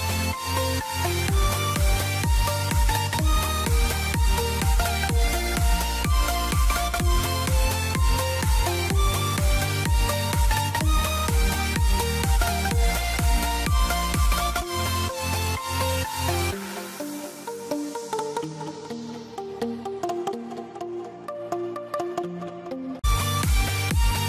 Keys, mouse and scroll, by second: 0.5 click, 1.3 e, 1.8 click, 3.2 click, 4.0 e, 4.5 click, 7.2 click, 7.6 shift+click, 8.4 click, 10.5 click, 12.4 ctrl+z, 13.3 click, 16.1 click, 16.5 scroll down 1, 16.7 middle click, 17.7 click, 19.8 g, 20.2 scroll up 1, 21.1 click, 22.5 e, 23.2 click.